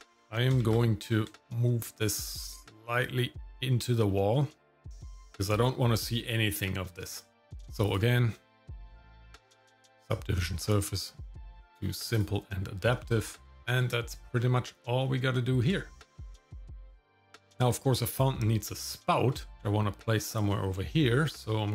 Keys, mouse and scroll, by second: 0.1 g, 7.3 shift+middle click, 7.3-7.9 scroll down 1, 7.9-10.0 drag, 11.5 click, 12.1 click, 13.2 shift+middle click, 13.7-14.3 scroll up 1, 14.3 scroll down 1, 15.0 middle click, 15.8 shift+middle click, 16.5 shift+middle click, 17.1 middle click, 18.3 middle click, 19.1 shift+middle click.